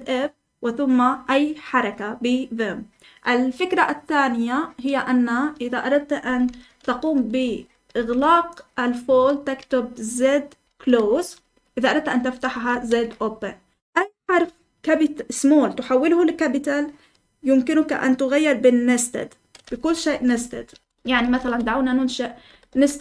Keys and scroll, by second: 6.6 Escape, 7.4 Escape, 7.7-8.1 typing, 10.4-11.1 typing, 12.6 typing, 20.1-23.0 typing.